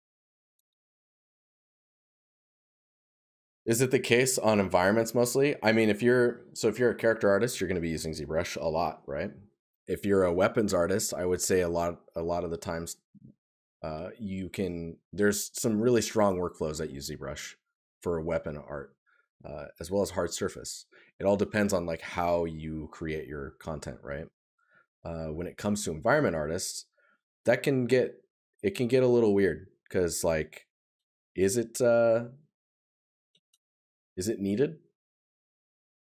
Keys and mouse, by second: 3.4 right click, 24.1 right click, 28.5 right click.